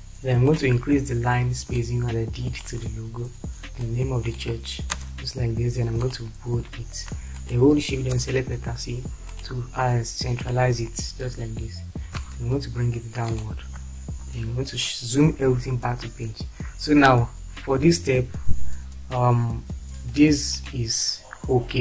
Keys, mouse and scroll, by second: 4.9 space, 8.2 shift+c, 12.2 Down, 14.6 shift+F4.